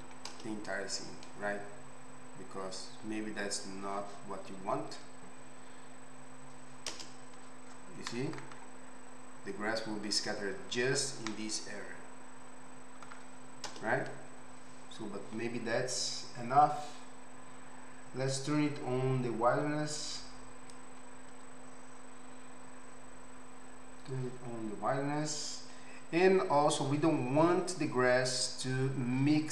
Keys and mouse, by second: 0.3 KP_0, 7.0 KP_0, 13.7 KP_0.